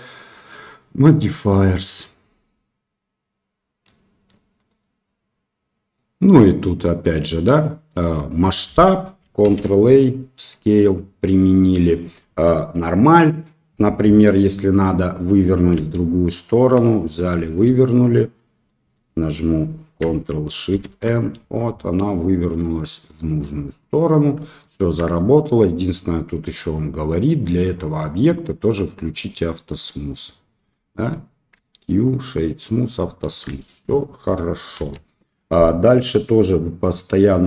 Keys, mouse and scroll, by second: 3.8-4.2 middle drag, 4.5 right click, 6.2-7.2 middle drag, 9.4 ctrl+a, 14.1 Tab, 14.4 middle click, 15.7 a, 17.5 shift+n, 18.6 middle click, 20.7 ctrl+shift+n, 21.9 middle click, 23.2 Tab, 23.6-24.0 middle drag, 24.6 shift+middle drag, 29.2 click, 29.8 middle click, 30.6 middle click, 31.5 q, 33.5 shift+middle drag, 33.9 middle click, 34.7 KP_7.